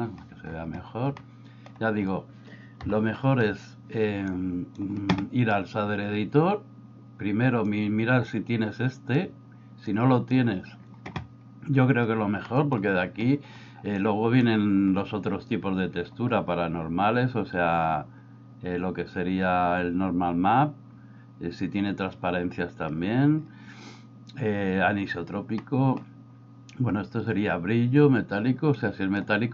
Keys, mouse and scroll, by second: 1.3 shift+middle click, 2.9 n, 4.3 click, 4.6 click, 7.8-9.2 drag, 9.9 click, 12.5 middle click, 14.0 click, 25.7 middle click, 28.8-29.5 drag.